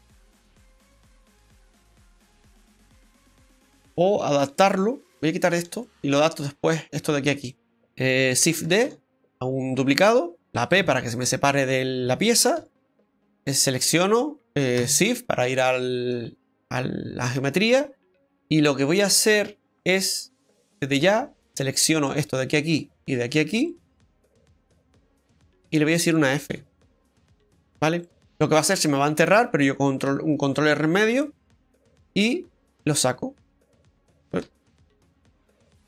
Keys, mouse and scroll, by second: 4.7 shift+right click, 5.8 middle click, 7.8 middle click, 8.8 shift+d, 10.7 p, 12.6 Tab, 13.0 right click, 14.8 Tab, 15.6 middle click, 17.2 scroll up 1, 17.8-18.2 scroll up 1, 19.8 click, 20.7 right click, 22.2 shift+right click, 26.5 f, 27.6-28.0 scroll down 1, 28.0 middle click, 30.1 ctrl+r, 30.7 click, 31.2 middle click, 32.8 click, 34.4 ctrl+z, 34.5 ctrl+x.